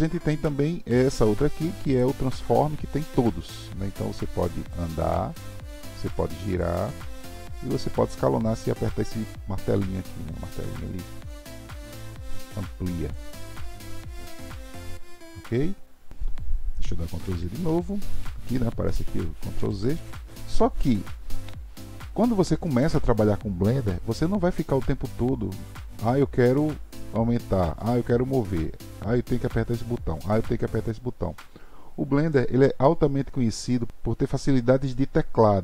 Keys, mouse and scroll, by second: 1.9-4.8 drag, 6.6 click, 9.0 click, 11.3 click, 13.1 click, 17.3 ctrl+z, 17.7 ctrl+z, 19.6 ctrl+z, 19.9 ctrl+z, 20.9-24.0 drag.